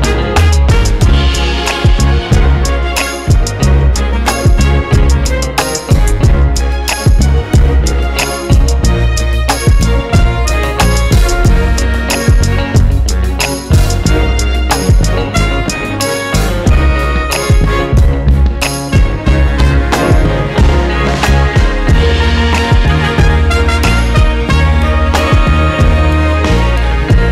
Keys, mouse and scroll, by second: 1.6-8.3 drag, 4.4 scroll down 1, 4.7 scroll up 1, 7.0 scroll down 1, 7.3 KP_7, 7.6-7.9 scroll down 1, 8.0 s, 8.6 s, 9.9 KP_3, 14.4 KP_0, 14.7 scroll up 1, 15.2 scroll down 1, 15.7 KP_1, 19.3 Tab, 19.7 KP_0, 20.0 scroll up 1, 20.8 scroll up 1, 21.8-22.2 scroll down 1, 22.5 KP_5, 24.2 click, 25.5 a, 26.1 KP_Decimal, 26.3 scroll up 1, 26.7 Tab.